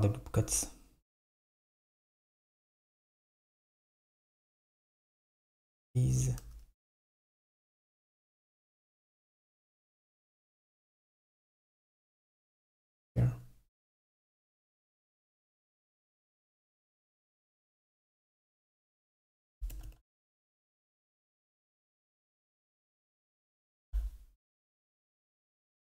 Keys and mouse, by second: 1.3 click, 5.5 click, 8.4 click, 9.3 click, 12.5 click, 14.5 click, 15.1 alt+click, 17.1 KP_7, 18.1 KP_3, 19.5 click, 19.9 g, 21.2 Escape, 22.7 click, 23.7 alt+click, 25.2 click.